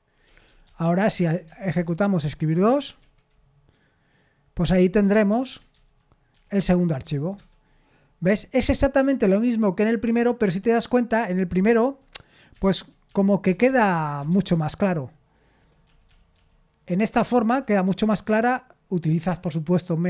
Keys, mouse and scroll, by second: 0.0-1.9 typing, 3.0 F5, 5.2 Escape, 5.7 ctrl+n, 6.1-7.3 typing, 11.7 ctrl+n, 12.6 ctrl+n, 12.8-15.5 typing, 14.3 ctrl+n, 16.9-18.3 typing.